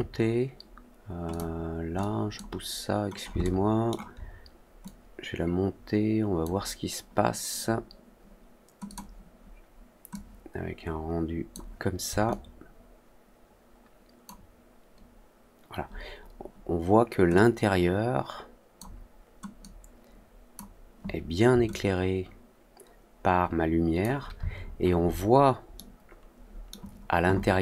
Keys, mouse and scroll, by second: 1.2 click, 1.9 click, 3.3-3.8 alt+middle drag, 4.8-6.3 drag, 8.8 click, 10.0-11.4 drag, 12.2-14.2 alt+drag, 17.3-18.7 drag, 19.5-20.5 drag, 21.6-23.9 alt+drag, 24.5 alt+middle click, 25.0 alt+middle click, 25.7-26.6 alt+middle drag.